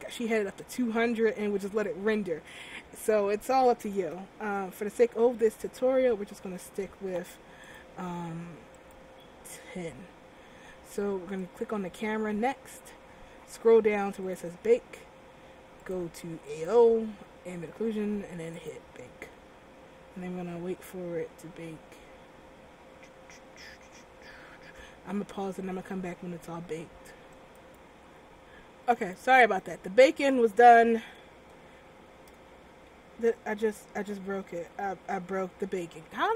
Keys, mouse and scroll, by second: 4.1 a, 6.0-7.3 scroll up 7, 7.8 click, 9.8-11.0 scroll down 6, 11.5 click, 13.2-13.8 scroll down 5, 14.4 click, 14.7-15.8 scroll down 5, 15.9 click, 18.7 click, 29.2 click, 31.5 Tab, 33.3 ctrl+z, 34.0 right click, 34.8 Tab.